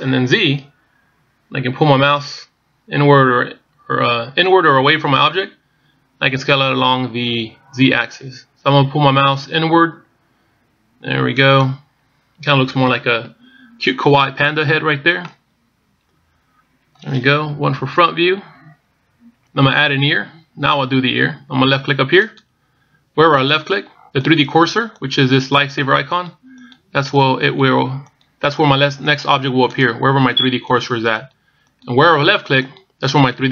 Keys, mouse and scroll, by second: 0.5 s, 16.1 middle click, 18.5 KP_1, 23.3 click, 24.3 click, 25.1 click, 25.8 click, 26.4 click, 27.0 click, 27.9 click, 27.9 click, 28.3 click, 28.9 click, 29.4 click, 29.9 click, 30.5 click, 31.1 click, 31.6 click, 32.0 click, 32.6 click, 33.2 click.